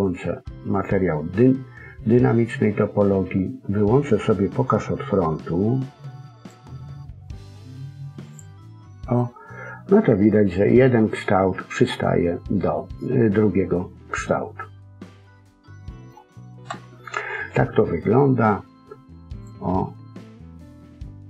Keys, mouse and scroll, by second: 6.3 click, 8.2 click, 9.1 middle click, 16.6 KP_1, 19.2 click.